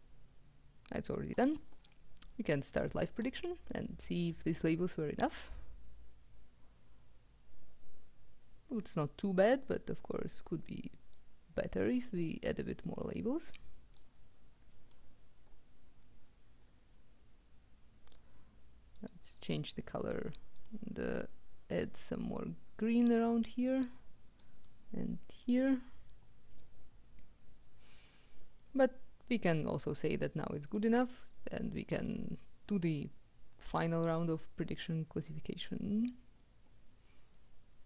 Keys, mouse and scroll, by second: 2.8-3.9 drag, 11.2-12.6 drag, 14.0-15.5 drag, 18.8 right click, 20.2 click, 21.9-23.6 drag, 24.5-26.1 drag, 30.9 click, 31.8 click.